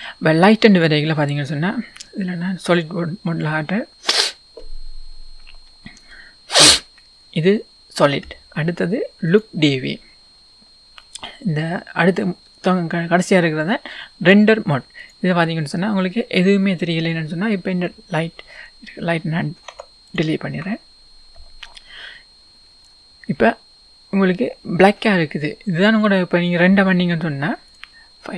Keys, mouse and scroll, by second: 2.7 click, 7.2 scroll up 1, 9.3-12.7 drag, 15.0 click, 20.2 x, 21.9-22.4 scroll up 1, 22.4-23.0 scroll down 1.